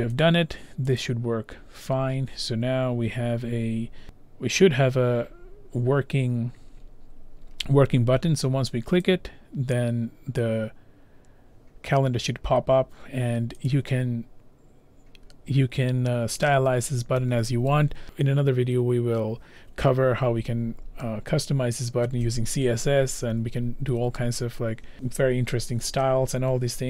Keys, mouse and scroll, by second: 0.2 click, 1.0 click, 5.3 scroll, 9.1 click, 13.7 click.